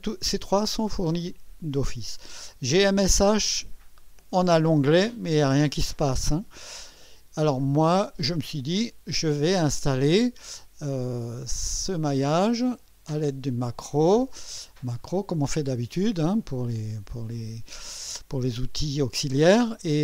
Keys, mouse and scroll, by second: 2.7 click, 11.1 click, 13.1 click, 15.0 click.